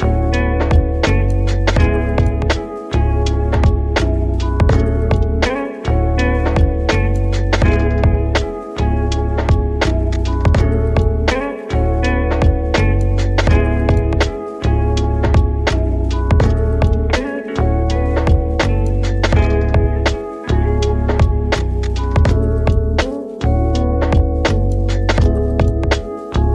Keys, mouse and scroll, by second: 1.2 r, 2.5 click, 4.1 click, 4.7 click, 5.9 ctrl+z, 7.1 click, 7.8 ctrl+z, 8.3 click, 9.2 click, 11.7 click, 12.4 KP_3, 14.1 drag, 21.2-21.6 drag, 22.2-22.8 drag, 23.9 click, 25.3 KP_1, 26.2 click.